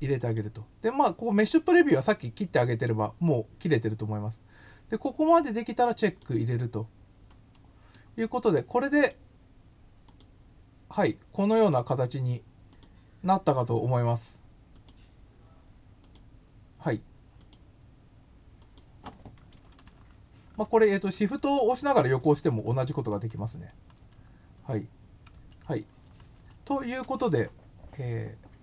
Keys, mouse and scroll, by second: 0.2 click, 6.0 click, 7.5 middle click, 8.9 click, 10.1 click, 11.5 click, 12.7 click, 14.7 click, 16.0 click, 17.4 click, 18.6 click.